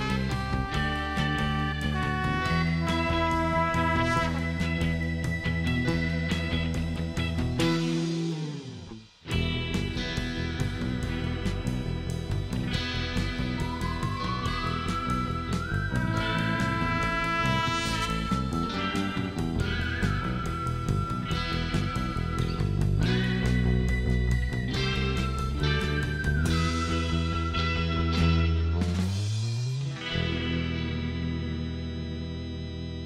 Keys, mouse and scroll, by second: 0.9 click, 1.3 click, 3.3 click, 4.5 click, 5.2 click, 5.7 click, 8.1 click, 9.8 click, 11.3-11.9 scroll up 3, 13.3 click, 14.5 click, 15.8 click, 16.4 click, 17.4 middle click, 17.9-18.3 scroll up 2, 18.3 middle click, 19.2 click, 20.0 click, 20.4 scroll down 1, 20.7 middle click, 21.7 click, 22.9 click, 23.3 right click, 23.7 scroll up 2, 24.1 middle click, 28.7 click, 30.4 click, 31.3 click, 31.9 right click, 32.9 click.